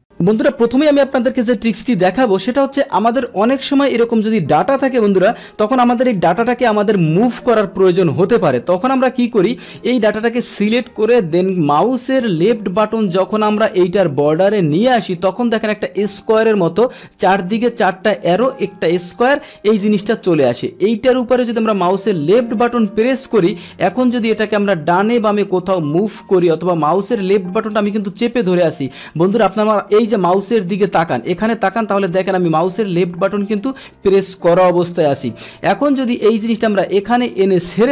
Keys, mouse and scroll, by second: 3.3 click, 4.6 ctrl+shift+Down, 6.6 ctrl+BackSpace, 22.4-37.8 drag, 32.0 scroll down 2, 32.1 scroll up 2, 32.2 scroll down 2.